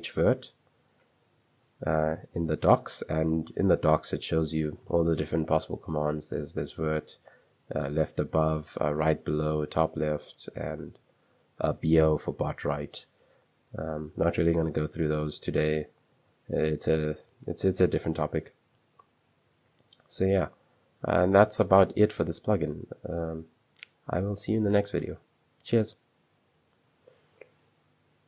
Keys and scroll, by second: 0.3 Return, 2.8-5.3 typing, 7.1-12.4 typing, 16.2 ctrl+o, 19.0 ctrl+o, 19.7-20.3 typing, 22.0 super+2, 24.5 typing.